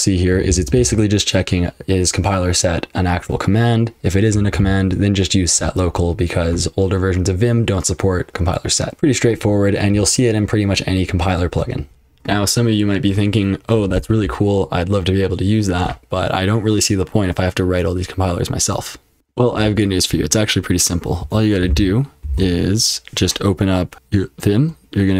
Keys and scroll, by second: 0.0-1.3 typing, 4.1-5.3 typing, 8.9 F12, 8.9 super+h, 8.9 super+l.